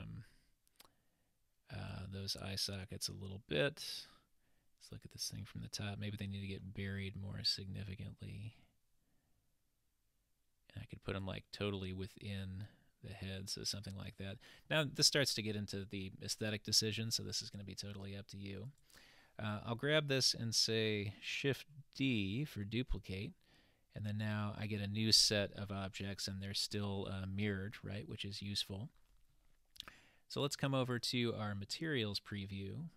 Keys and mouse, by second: 2.4-4.0 middle drag, 4.0 typing, 5.0 click, 7.6-11.3 drag, 11.3 typing, 11.7-14.7 middle drag, 14.7 typing, 15.6-16.2 middle drag, 17.4 click, 17.4 typing, 18.7 click, 22.0 shift+d, 30.6 click.